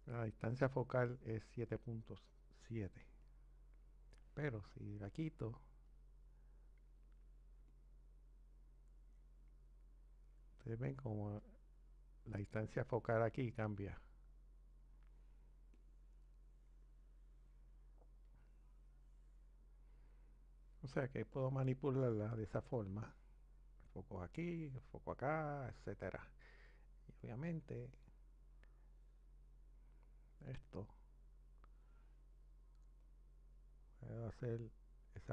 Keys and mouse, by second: 3.3 click, 6.5 click, 6.6 click, 8.2 click, 15.8 click, 21.3 click, 22.5 click, 22.6 click, 27.5 click, 33.0 click.